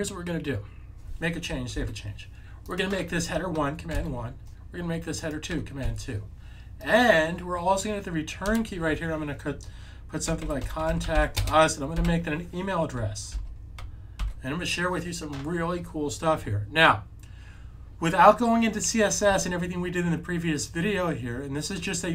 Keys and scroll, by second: 1.7 super+s, 3.8 super+1, 5.7 super+2, 10.1-12.0 typing, 13.3 super+2, 14.1 super+s.